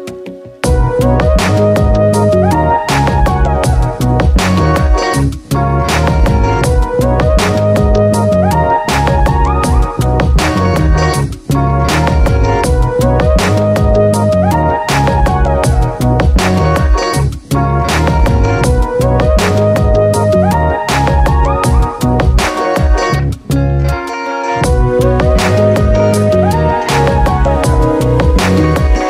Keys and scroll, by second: 4.0 Return, 12.4 space, 19.1 ctrl+d, 27.6 Return.